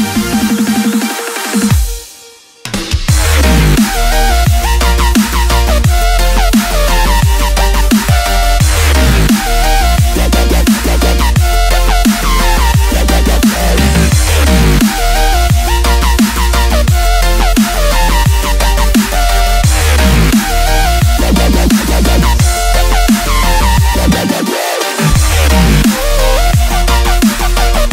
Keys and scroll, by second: 3.3-4.1 space, 4.2 v, 6.5 Tab, 7.0-8.0 typing, 9.9 a, 10.7 v, 15.6 shift+super+[, 16.5 super+2, 16.6 super+2, 23.0 super+c, 23.9 space, 24.4 super+space, 24.4 super+space, 25.1 space, 25.6 super+space, 25.7 super+space, 25.8 super+space, 25.9 super+space, 26.0 super+space, 27.1 super+v, 27.7 space.